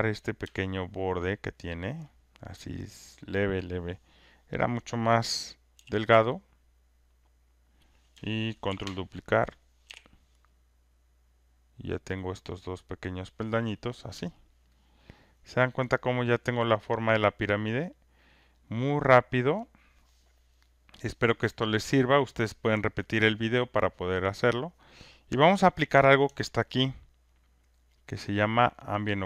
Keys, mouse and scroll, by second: 0.3 click, 0.9 alt+right click, 1.4 alt+click, 1.9 alt+middle click, 7.6 click, 7.6 r, 8.6 ctrl+d, 9.8 w, 10.1-12.4 drag, 13.1 click, 13.1 w, 13.8 click, 14.6 alt+right click, 17.6 alt+click, 18.4 alt+right click, 18.8 alt+scroll, 19.6 alt+right click.